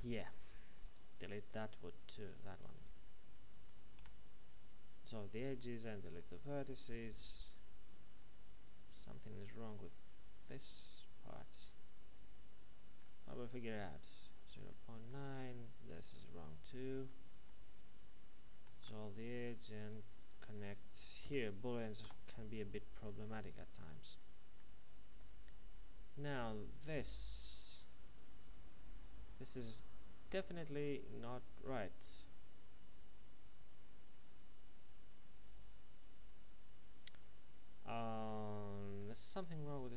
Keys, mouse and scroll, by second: 0.8 right click, 3.6 shift+right click, 4.0 x, 4.4 click, 6.1 middle click, 13.4 right click, 14.7 middle click, 16.0 right click, 16.7 right click, 17.3 x, 17.7 click, 19.3 click, 19.8 right click, 20.6 shift+right click, 21.2 alt+m, 22.0 Return, 23.0 middle click, 39.3 right click.